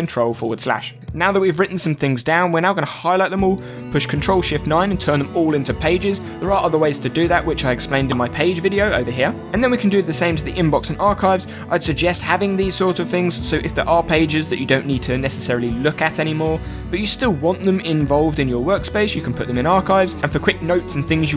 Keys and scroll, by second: 0.0-0.7 typing, 4.9 ctrl+shift+9, 9.1 ctrl+shift+9.